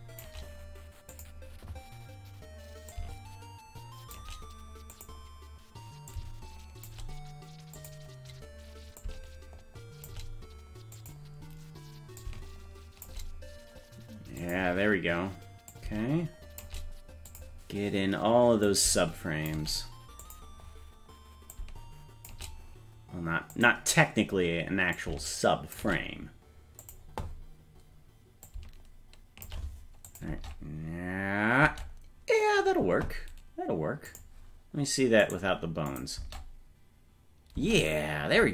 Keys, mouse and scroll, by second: 1.2 click, 2.9-4.2 shift+drag, 4.9 click, 6.1 shift+click, 7.8 click, 9.0-10.1 shift+drag, 11.0 click, 12.2 shift+click, 14.4 click, 15.7 shift+click, 17.3 click, 18.7 shift+click, 20.3 click, 21.6 shift+click, 23.6 click, 25.0 shift+click, 26.8 click, 28.5-29.5 shift+drag, 30.1 click, 30.3 space, 31.7 space, 34.1 click, 35.3 right click, 35.9 click, 36.2 space, 37.6 space.